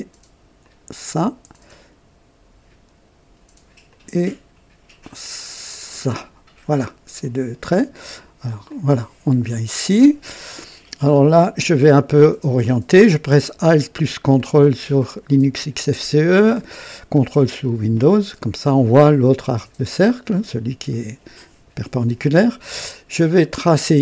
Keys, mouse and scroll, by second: 0.5 click, 3.8 click, 5.8 click, 7.1 click, 8.4 click, 9.4-9.8 scroll up 1, 10.0-10.7 right drag, 14.3-16.0 ctrl+alt+drag, 16.8-17.5 right drag, 23.5 click.